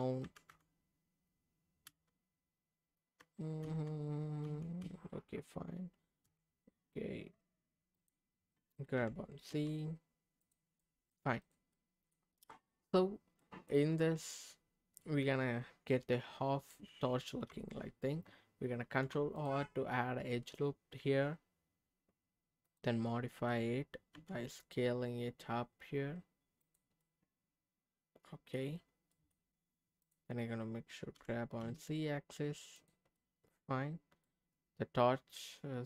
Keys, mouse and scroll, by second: 0.2 g, 0.5 y, 1.9 y, 3.2 z, 3.6 z, 4.4 x, 4.8 x, 6.2 y, 7.9 click, 9.0 g, 9.5 z, 10.4 click, 10.8 middle click, 11.4 click, 11.7 middle click, 12.6-13.4 scroll up 1, 13.4 middle click, 14.1 scroll down 1, 14.3-16.7 middle drag, 18.8 ctrl+r, 22.6 click, 23.1 middle click, 24.1 s, 26.6 click, 27.0-28.5 middle drag, 29.1 middle click, 30.0 click, 31.1 g, 31.6 z, 32.8 click, 33.1 middle click, 34.2-35.8 middle drag.